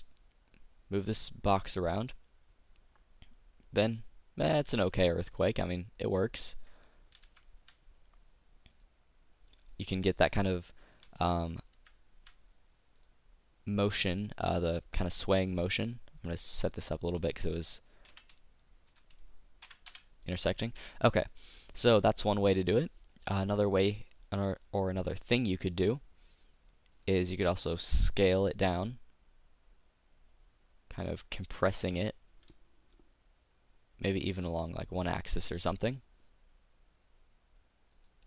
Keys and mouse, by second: 1.2 click, 6.4-7.5 drag, 7.5 ctrl+z, 11.4 ctrl+z, 12.0 ctrl+z, 13.0-14.9 drag, 16.8-20.4 drag, 21.3-25.1 middle drag, 27.0-28.8 drag, 28.8 s.